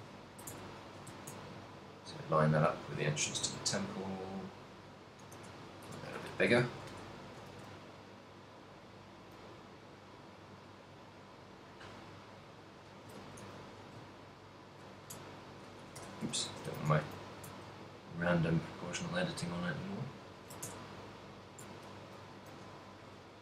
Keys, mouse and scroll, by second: 0.3 ctrl+middle click, 0.7 Tab, 1.1 g, 3.1 ctrl+click, 3.3 s, 6.5 KP_3, 6.9 Tab, 7.7 shift+d, 12.6 ctrl+click, 13.3 ctrl+middle click, 13.3 z, 13.7 g, 15.2 right click, 16.1 o, 16.5 a, 16.8 a, 17.0 g, 20.4 ctrl+shift+click, 20.8 Tab, 21.3 right click, 21.8 Tab, 22.0 a, 22.8 a, 22.8 b.